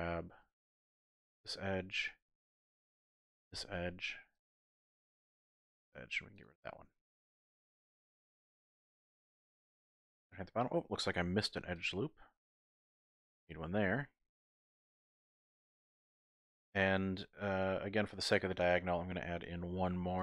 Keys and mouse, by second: 3.5 x, 5.3 alt+shift+click, 5.9 x, 6.9 click, 8.6 shift+click, 8.7 shift+middle click, 9.8 middle click, 11.3 ctrl+r, 13.2 click, 13.6 middle click, 15.8 middle click, 17.8 middle click, 19.8 ctrl+r.